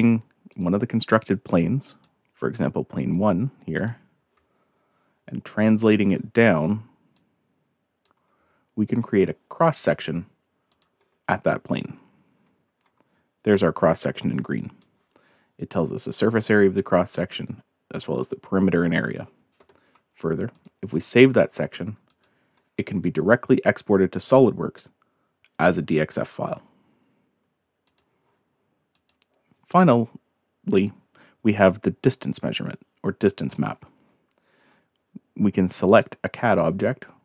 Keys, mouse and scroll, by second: 0.5 click, 1.9 click, 3.1 click, 3.7 click, 7.1-8.0 drag, 10.7 click, 13.5-14.8 drag, 20.5 click, 22.1 click, 27.9 click, 28.9 click, 29.9-33.5 drag, 35.8 click.